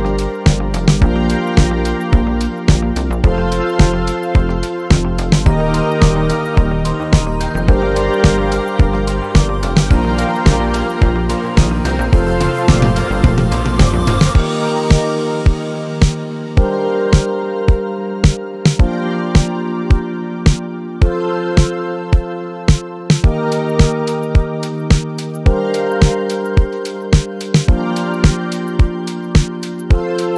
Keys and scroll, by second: 8.9-10.2 typing.